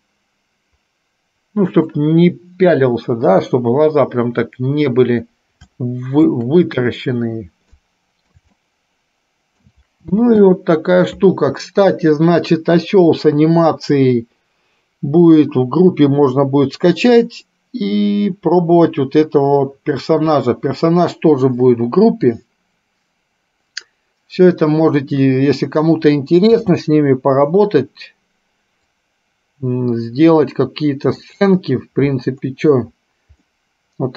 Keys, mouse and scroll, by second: 0.2-2.1 middle drag, 3.4 KP_3, 5.7 shift+middle click, 8.0 middle click, 8.7-9.9 shift+middle drag, 10.4 space, 26.7 space, 29.0-31.5 drag, 33.7-34.1 middle drag.